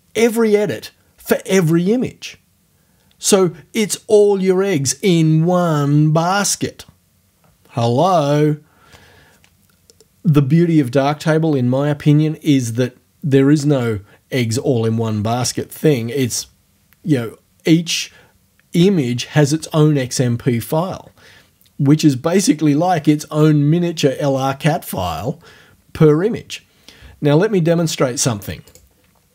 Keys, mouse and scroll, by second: 28.7 click.